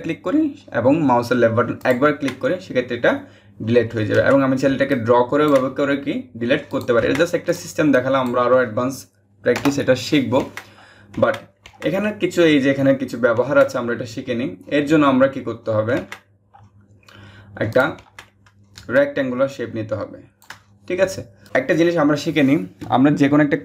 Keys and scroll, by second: 3.7 ctrl+z, 9.2 BackSpace.